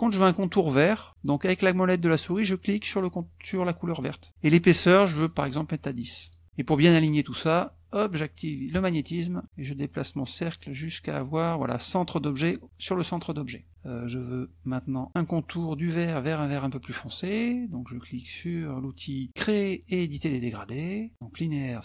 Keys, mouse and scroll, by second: 4.2 click, 5.2 right click, 6.3 click, 8.8 click, 9.4-11.8 drag, 20.1 click.